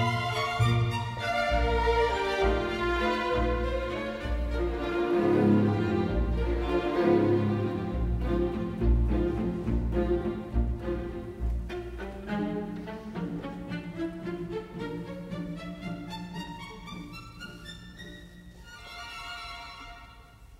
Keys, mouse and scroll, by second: 0.5 Escape, 1.5 ctrl+j, 2.7 Escape, 7.7 ctrl+t, 13.0 Escape, 14.0 ctrl+j, 16.6-17.1 typing, 19.9 KP_Decimal, 20.2 Return.